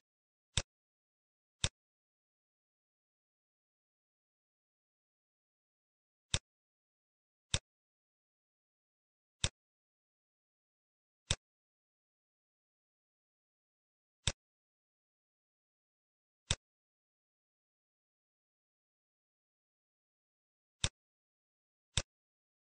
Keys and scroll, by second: 5.4 shift+s, 10.5 shift+d.